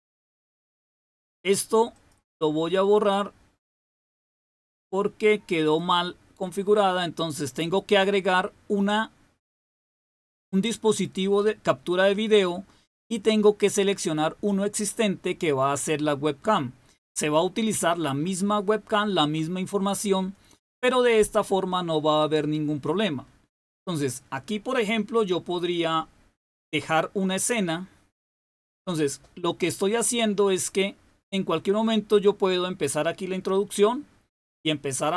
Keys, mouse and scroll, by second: 1.8 click, 4.1 click, 5.6 click, 7.5 click, 10.8 click, 13.2 click, 15.2 click, 17.0 click, 25.0 click, 28.1 click.